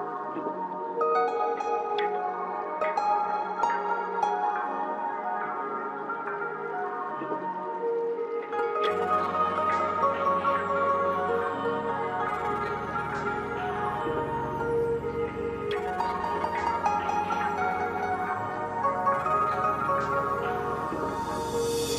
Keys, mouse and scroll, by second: 1.2-1.6 scroll up 1, 4.4 click, 6.1 scroll down 1, 7.1-12.3 drag.